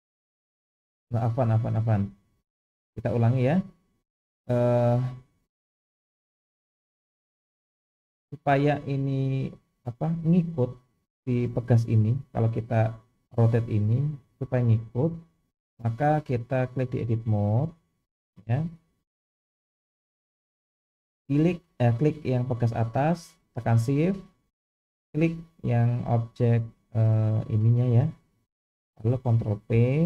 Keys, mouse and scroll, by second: 5.4 click, 7.5 click, 9.2 click, 10.3 click, 11.3 click, 12.4 click, 13.2 r, 15.4 click, 16.7-17.6 drag, 20.1 click, 20.7 click, 25.1 shift+click, 27.5-28.2 scroll down 2, 28.2-28.7 scroll up 2, 29.7 ctrl+p.